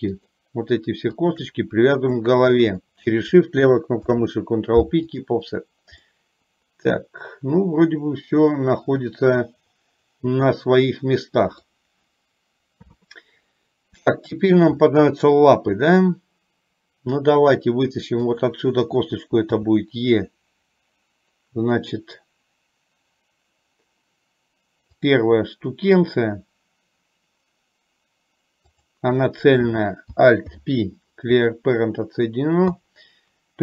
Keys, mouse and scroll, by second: 0.2 shift+click, 2.7 shift+click, 4.2 ctrl+p, 6.3-11.9 middle drag, 12.8 KP_3, 14.3 shift+middle click, 19.8 e, 28.7 click, 30.6 alt+p.